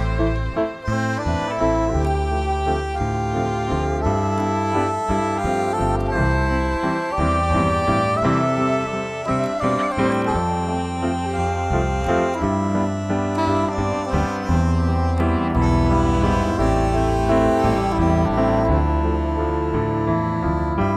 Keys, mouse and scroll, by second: 2.4-8.2 drag, 9.2 click, 14.6 click, 14.9-20.9 alt+drag.